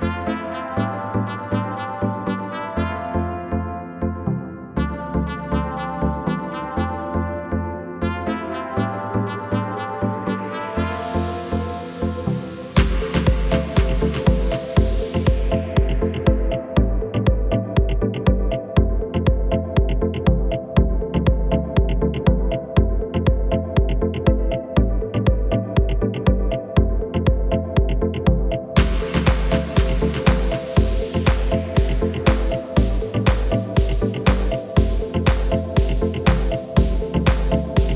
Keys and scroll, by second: 11.4 Delete, 31.7 Return, 34.8 Return.